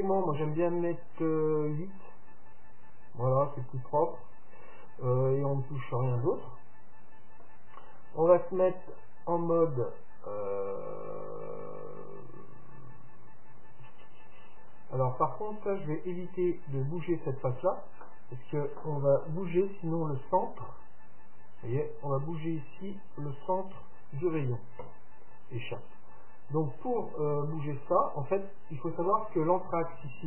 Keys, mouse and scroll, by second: 0.3-3.7 drag, 6.3-8.2 middle drag, 9.0-11.0 drag, 14.7-15.8 right drag, 15.5-17.2 drag, 15.8 middle click, 27.9-29.7 middle drag.